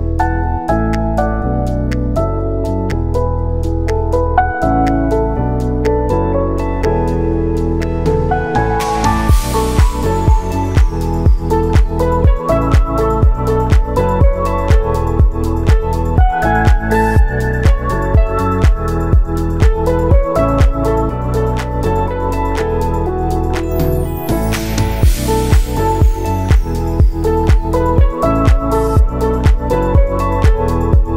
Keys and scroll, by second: 0.8 ctrl+v, 0.9 Return, 2.2 ctrl+v, 2.3 ctrl+Return, 3.7 ctrl+v, 3.8 Return, 5.6 ctrl+v, 5.8 Return, 7.0 ctrl+v, 7.1 Return, 9.3 Return, 11.0 ctrl+v, 11.1 Return, 12.6 ctrl+v, 12.8 Return, 13.8 ctrl+a, 15.1 u, 16.1 ctrl+s, 25.1 ctrl+s, 25.8 space.